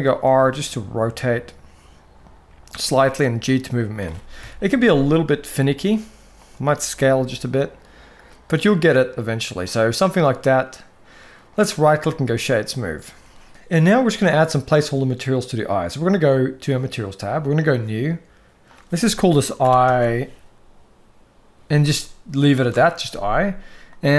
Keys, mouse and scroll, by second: 2.5 g, 4.1 KP_1, 5.1 s, 6.8 g, 11.2-11.8 right drag, 16.5 click, 17.3-18.0 drag, 18.4-22.4 drag, 23.7 click.